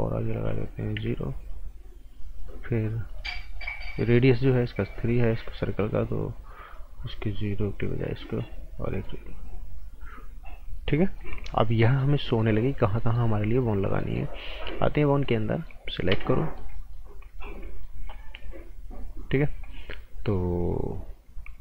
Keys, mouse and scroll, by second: 0.9 KP_0, 3.1 click, 5.4 Right, 6.6 click, 8.0 KP_0, 8.9 click, 10.4-11.0 scroll up 1, 11.0 right click, 11.3 scroll up 1, 11.5 right click, 12.7 scroll up 1, 13.0 right click, 13.7 scroll up 1, 14.0 right click, 15.0 click, 15.2 right click, 16.1 a, 16.3 right click, 17.0 scroll down 1, 17.3 right click, 18.9 scroll down 1, 19.2 right click, 19.5 scroll up 1, 19.7 right click.